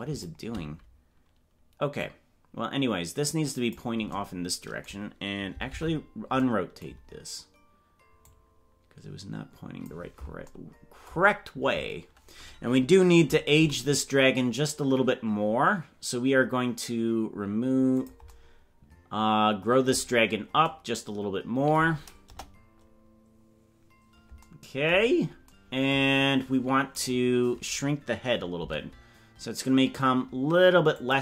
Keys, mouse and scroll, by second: 1.9-3.8 drag, 5.7 alt+r, 8.2 click, 13.5 s, 20.3 scroll down 3, 22.2 KP_0, 25.2 scroll down 1, 27.2-28.5 right drag, 28.5 s.